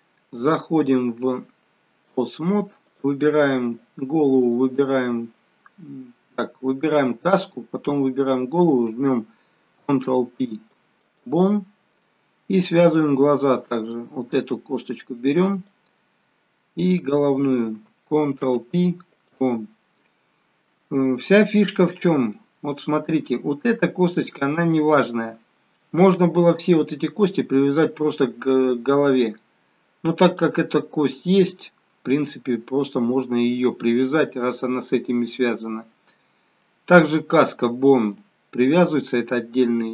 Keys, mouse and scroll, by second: 0.3 shift+click, 4.4 click, 5.2 shift+click, 9.8 ctrl+p, 11.9 middle click, 13.5-14.4 scroll up 1, 14.6-15.0 scroll down 1, 15.5 click, 16.8 shift+click, 18.4 ctrl+p, 20.1 middle click, 21.1 shift+middle click, 22.0-22.5 scroll up 2, 22.5-23.0 scroll down 1, 23.0 middle click, 36.6 middle click, 36.6-38.7 scroll down 1, 38.7 middle click.